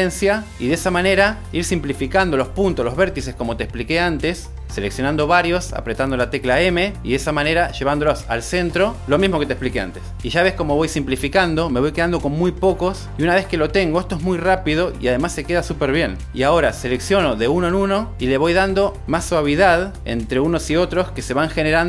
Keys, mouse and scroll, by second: 1.1-1.8 drag, 2.2 m, 3.7 click, 4.1 g, 5.4 click, 5.9-6.3 drag, 6.5 m, 7.6 g, 8.2 click, 8.7-11.5 typing, 8.9 click, 9.4 click, 10.0 click, 10.9 click, 11.3 click, 11.7 super+z, 12.1 click, 12.5-18.3 typing, 12.8 click, 13.3 click, 13.7 click, 18.0 shift+click, 18.4 click, 19.7 ctrl+shift+b, 21.2 click.